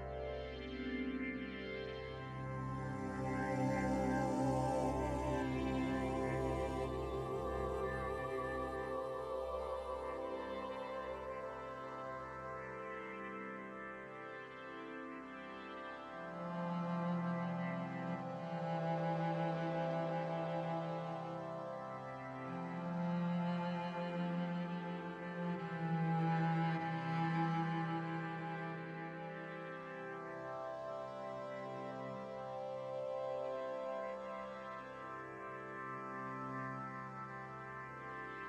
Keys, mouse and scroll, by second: 0.9 ctrl+r, 4.1 click, 5.3 shift+middle click, 5.5-6.1 scroll up 2, 5.9 alt+right click, 6.8 g, 9.0 shift+middle click, 9.2-10.0 scroll up 2, 9.4 shift+middle click, 10.0 click, 10.3 alt+right click, 10.7 s, 12.4 g, 13.1 scroll down 2, 13.2 middle click, 13.2-13.5 scroll up 1, 13.5 shift+middle click, 13.8 middle click, 14.2 Tab, 14.4 middle click, 14.8 shift+middle click, 16.0-16.7 scroll up 1, 16.7 click, 16.7-17.1 scroll up 1, 17.9 click, 19.1 click, 20.6-21.3 scroll down 1, 21.3 scroll down 2, 21.3-21.7 scroll up 1, 22.6 n, 23.1 click, 25.3 click, 25.4 click, 26.0 r, 27.2 right click, 27.8 click, 29.4 click, 31.7 ctrl+a, 32.4 right click, 32.8 middle click, 33.9 click, 34.6 scroll down 3, 34.8 middle click, 35.3 right click, 35.7 right click, 35.9 middle click, 36.4 r.